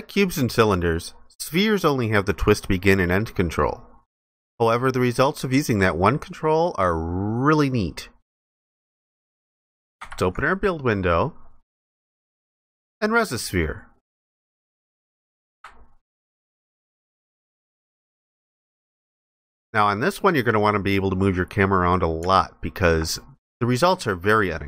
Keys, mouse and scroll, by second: 10.0 ctrl+b, 16.1 alt+click, 18.1 alt+click, 19.3 ctrl+alt+click, 21.2 alt+click.